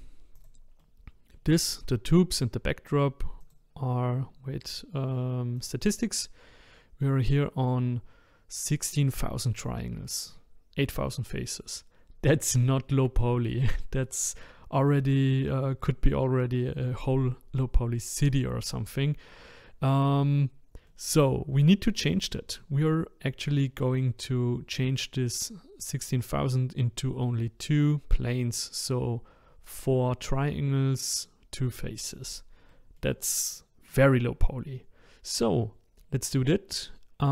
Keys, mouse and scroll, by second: 0.4 click, 0.8-3.4 middle drag, 3.4-6.4 drag, 20.9-23.9 middle drag, 32.7-37.3 middle drag.